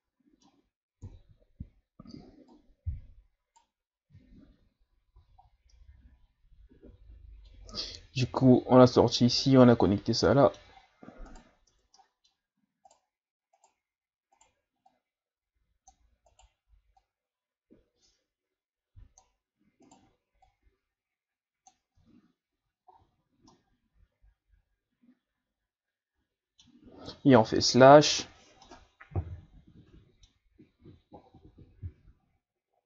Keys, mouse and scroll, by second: 1.0 KP_7, 2.5 right click, 4.2 Tab, 4.8-5.7 scroll down 9, 5.2 a, 5.7-8.7 middle drag, 10.2-10.7 middle drag, 10.7-11.3 scroll up 5, 11.3 right click, 11.7 Tab, 12.0 middle click, 12.3-12.9 scroll up 1, 12.9 right click, 13.5 right click, 14.4 right click, 14.9-16.3 drag, 16.3 right click, 17.0-19.9 drag, 19.9 right click, 20.4-22.0 drag, 22.0 Tab, 22.5 a, 22.9-23.5 scroll down 5, 23.5-26.5 middle drag, 27.4 KP_Divide, 28.3-28.7 scroll down 2, 28.7-30.4 middle drag, 30.4-30.8 scroll up 4, 31.3-32.3 scroll down 4.